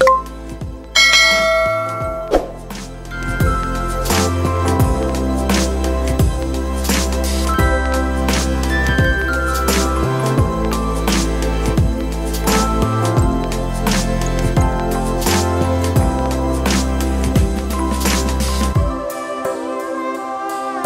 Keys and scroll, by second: 2.2 shift+a, 9.1 s, 11.5 Tab, 12.3 ctrl+r, 14.0 Tab.